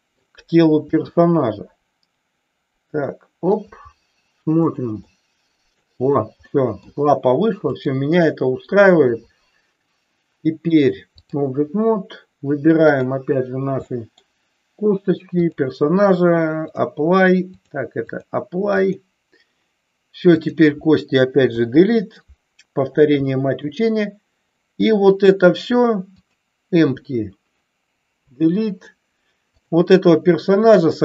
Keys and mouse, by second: 0.9 r, 4.5 click, 4.9 middle click, 6.5 middle click, 7.6-11.4 drag, 12.8 click, 13.9 middle click, 16.6 click, 18.1 click, 20.4 click, 21.4 Delete, 23.1 middle click, 26.1 click, 28.1 Delete, 29.5 click.